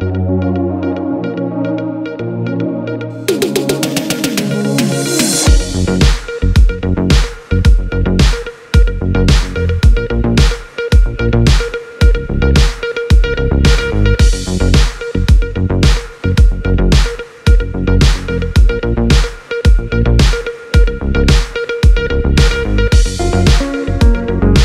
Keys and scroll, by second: 2.4 0, 3.1 Return, 13.1 u.